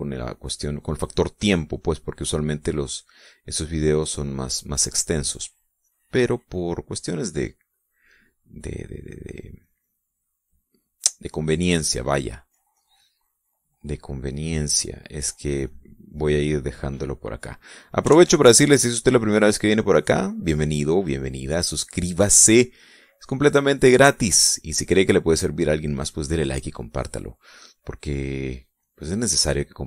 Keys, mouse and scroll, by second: 0.7-3.2 drag, 3.7 click, 4.2 middle click, 5.0-6.3 drag, 6.5-7.8 drag, 8.0-9.1 drag, 9.2 middle click, 10.2-11.2 drag, 11.3 middle click, 12.3 click, 12.9 middle click, 13.6 click, 14.9-16.6 drag, 16.7 click, 17.7 middle click, 18.7 click, 19.2 ctrl+z, 19.7 ctrl+click, 20.9 click, 21.9 click, 23.7-25.7 drag, 25.9-27.4 drag, 27.9 click, 29.1 click.